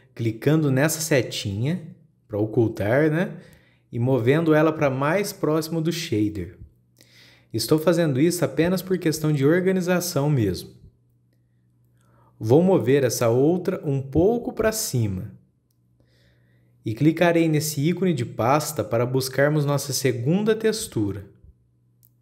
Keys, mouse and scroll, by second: 2.1 click, 3.9-7.0 drag, 7.4-9.2 shift+middle drag, 9.2 click, 14.6 click, 21.7 click.